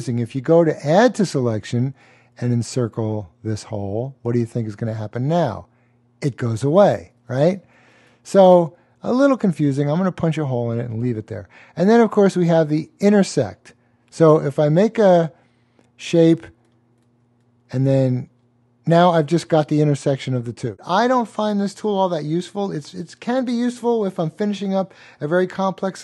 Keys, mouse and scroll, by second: 8.3 click.